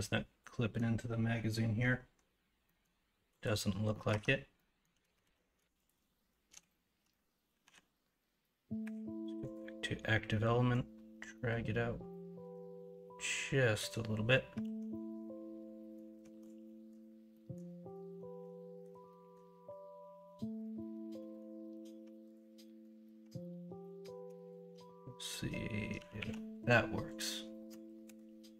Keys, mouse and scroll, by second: 2.6 middle click, 3.9 middle click, 4.1 Tab, 4.5 middle click, 5.2 alt+z, 7.6 l, 13.8 click, 14.6 alt+z, 14.9-16.2 middle drag, 16.2 alt+z, 16.6-19.3 middle drag, 19.3-20.8 scroll down 1, 20.8-21.1 scroll down 1, 21.1 scroll up 1, 21.3-22.3 scroll down 1, 22.3-22.6 scroll down 1, 22.6 middle click, 24.0 Tab, 26.1 ctrl+s, 28.1 ctrl+KP_Subtract.